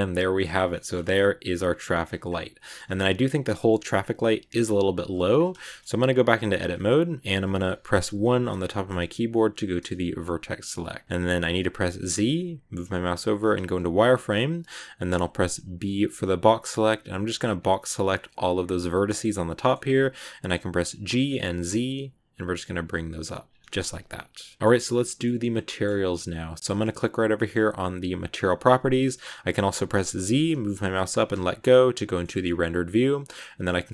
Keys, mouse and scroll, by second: 0.4 Tab, 0.5 scroll down 1, 0.6-2.4 shift+middle drag, 2.4 scroll down 2, 2.5 middle click, 2.7-3.4 scroll up 1, 3.4 scroll up 1, 3.4 middle click, 3.9 scroll down 2, 5.2-5.5 scroll up 2, 5.5 shift+middle click, 5.8 Tab, 8.6-12.6 shift+middle drag, 18.8 middle click, 19.2 scroll up 1, 19.5 shift+middle click, 19.7-21.0 scroll down 2, 21.0 g, 23.9 Tab, 23.9 scroll down 1, 24.0 middle click, 24.8 scroll up 2, 24.9-28.3 middle drag, 28.3 click, 30.1 z, 32.0 middle click, 32.2 scroll up 1, 32.2-33.4 shift+middle drag, 33.4 click.